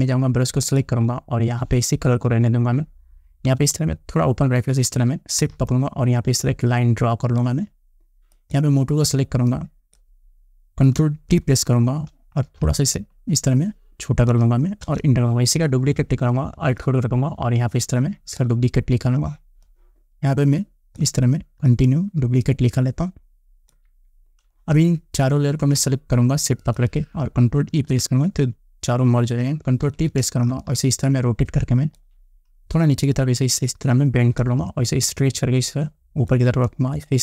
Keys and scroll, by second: 4.1 ], 11.9 ctrl+t, 15.4 Return, 28.3 ctrl+e, 30.4 ctrl+t.